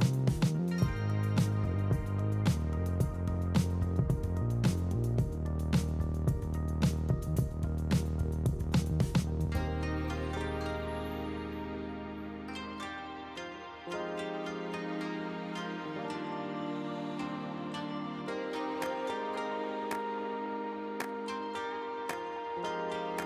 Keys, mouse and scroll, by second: 2.5 click, 4.0-5.7 drag, 11.3 a, 13.3 ctrl+l, 14.8 click, 16.0-17.3 drag, 18.7 click, 20.0-21.5 drag.